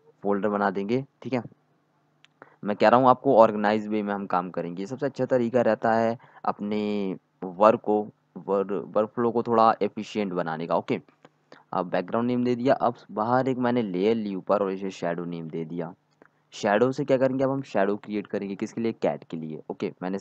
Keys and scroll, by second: 6.7-8.9 typing, 10.6-11.3 typing, 15.1-16.6 typing, 19.2 d.